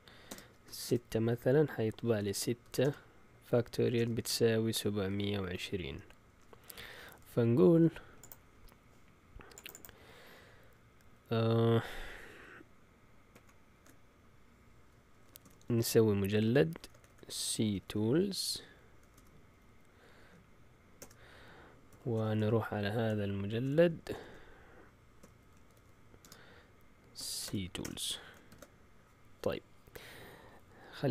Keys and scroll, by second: 0.0-1.1 typing, 2.2-2.8 typing, 3.9-6.2 typing, 13.3 shift+F4, 14.9-19.6 typing, 20.7-28.3 typing, 28.5 ctrl+l.